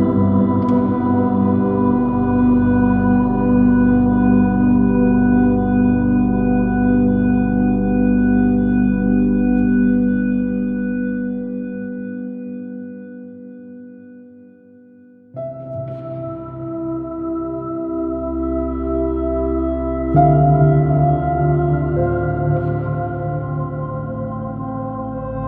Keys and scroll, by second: 1.9 super+z, 2.0 super+space, 2.1 super++, 2.3 super+space, 2.5 super++, 3.3 j, 9.7 space, 12.8 space, 16.6 space, 17.7 space, 19.9 space, 23.1 space.